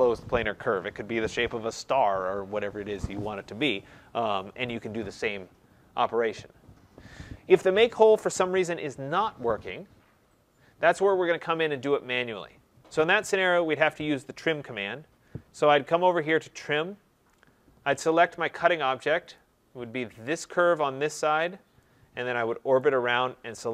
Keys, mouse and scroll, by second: 10.3 middle click, 10.4 middle click, 16.7 click, 19.3 click, 20.3 click, 21.0-21.6 scroll, 21.6 scroll, 22.7 right click, 23.1-23.7 scroll.